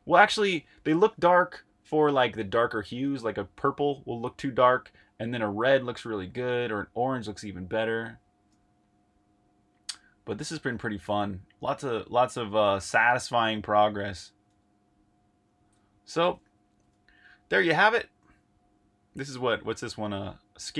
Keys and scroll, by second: 16.4 8.